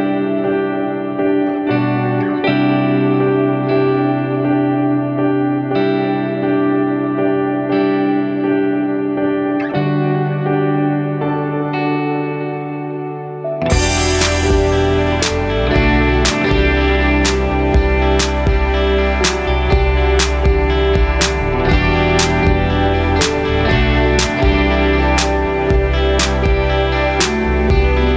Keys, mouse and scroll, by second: 0.0 shift+a, 4.0-5.1 drag, 5.7 click, 7.0 r, 10.4 click, 12.9-17.3 drag, 13.9 KP_0, 17.8 click, 22.9-23.4 scroll up 2, 23.8-25.0 scroll up 3, 25.0 r, 26.4 click, 27.3-28.1 drag.